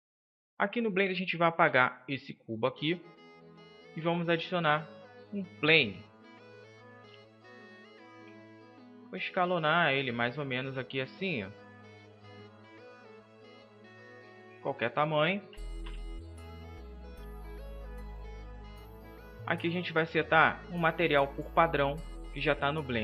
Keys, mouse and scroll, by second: 0.7-4.7 middle drag, 1.4 Delete, 3.9 shift+a, 9.4 s, 10.4-11.1 drag, 11.1 s, 12.1 drag, 14.3 click, 15.3 KP_7, 15.7 KP_5.